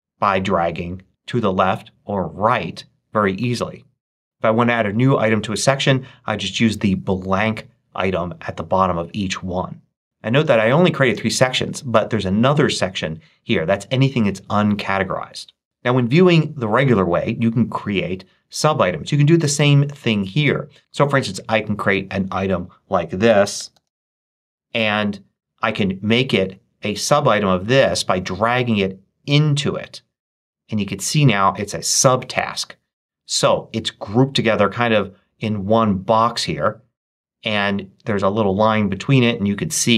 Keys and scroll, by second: 22.9-24.2 typing.